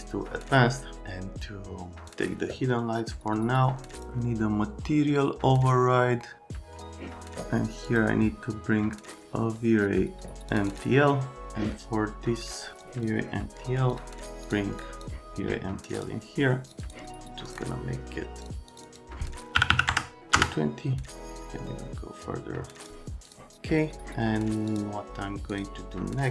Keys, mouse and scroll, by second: 12.8 click, 13.9 click, 14.4 click, 14.8 click, 15.9 click, 16.6 click, 16.8 click, 17.4 click, 18.4 click, 18.7 click, 18.9 click, 19.6 KP_2, 19.7 KP_2, 19.9 KP_0, 20.3 KP_Enter, 21.3 click, 23.3 click.